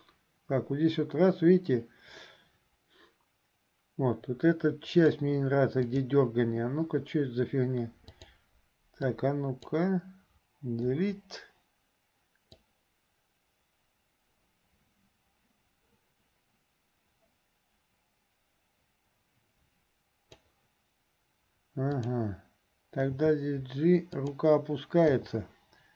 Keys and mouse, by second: 6.0 click, 8.3 click, 9.2 click, 11.1 Delete, 12.8-20.7 drag, 22.0 click.